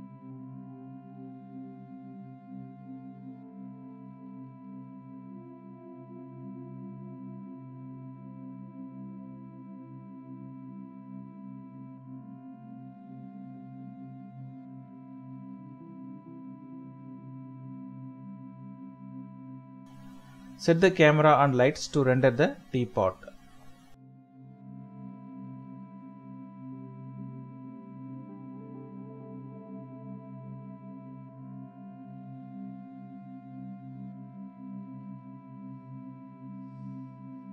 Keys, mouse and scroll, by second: 2.3 shift+middle click, 2.6 typing, 3.1 shift+middle click, 4.5 n, 7.7 shift+middle click, 7.9-8.3 scroll down 2, 8.3 middle click, 9.9 shift+middle click, 15.5 typing, 15.7 Return, 18.5 typing, 21.5-22.7 typing, 25.1 typing, 26.0 Return, 27.1 middle click, 27.4-27.9 scroll down 1, 27.9 typing, 29.6 typing, 31.1 typing, 33.3 typing, 35.3 typing.